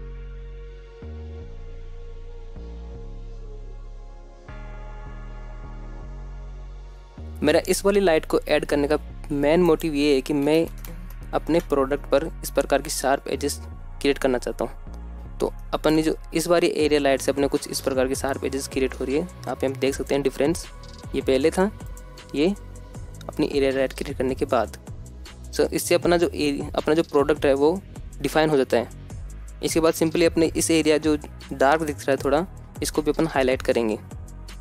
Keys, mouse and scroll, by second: 0.7 click, 0.8 middle drag, 1.0 scroll down 2, 1.1 middle click, 1.3-4.2 typing, 1.9 click, 2.0 middle click, 3.0 click, 3.1 middle click, 3.9 click, 5.6-8.7 drag, 10.0-13.0 drag, 11.1 KP_0, 13.1 scroll up 1, 16.1 scroll up 2, 16.5-16.8 shift+middle drag, 17.0 scroll up 1, 20.9 click, 22.8 click, 25.7 scroll down 1, 27.7-28.3 scroll down 3, 28.2-28.7 scroll up 2, 29.3-29.7 scroll up 1, 29.3 KP_0, 33.3 scroll down 1, 33.7-34.2 middle drag, 34.3 scroll down 1.